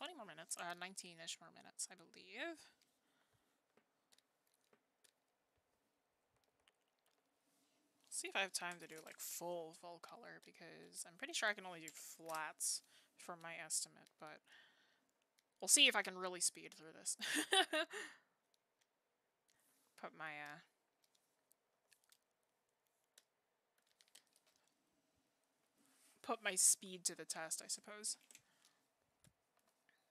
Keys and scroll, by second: 21.8 ctrl+z.